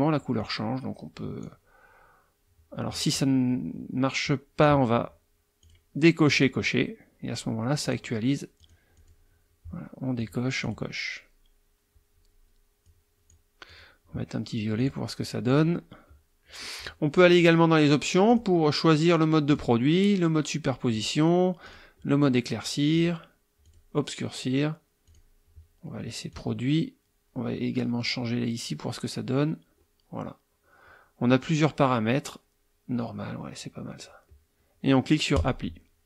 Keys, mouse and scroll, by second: 0.4-1.6 drag, 4.2 click, 5.6 click, 6.3 click, 7.8 click, 8.6 click, 8.9 click, 10.2 click, 10.6 click, 12.8-13.5 drag, 13.7 click, 14.8 click, 15.5 click, 17.1 click, 18.3 click, 19.4 click, 20.9 click, 21.6 click, 22.9 click, 23.6 click, 25.0 click, 26.3 click, 28.3 scroll down 1, 29.6 scroll down 1, 30.6 scroll down 1, 32.1 scroll up 1, 35.3 click, 36.0 scroll up 2.